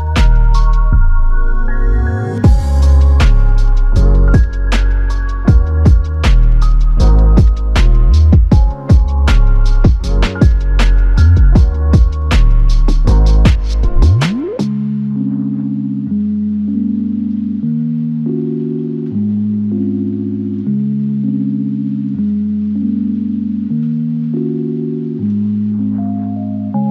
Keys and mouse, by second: 15.6 ctrl+click, 19.6 w, 20.3 w, 20.7 alt+click, 24.1 alt+click, 24.3 ctrl+click.